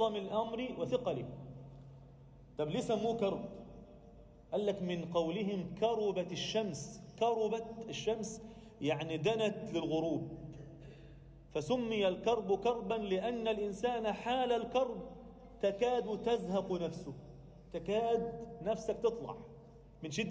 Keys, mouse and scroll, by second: 6.6 Tab, 6.9 Tab, 7.2 click, 7.5 alt+shift+middle click, 8.2-8.7 scroll down 2, 8.7 ctrl+r, 10.3 click, 10.8 shift+click, 11.7 g, 14.1 click, 15.0 g, 16.7 Tab, 16.9-17.8 scroll down 1, 17.8-18.6 scroll up 1, 18.6 Tab.